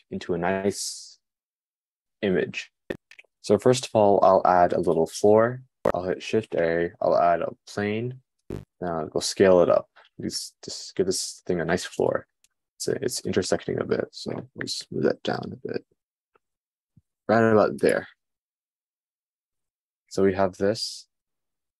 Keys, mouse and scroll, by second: 6.6 shift+a, 9.4 s, 15.7 g.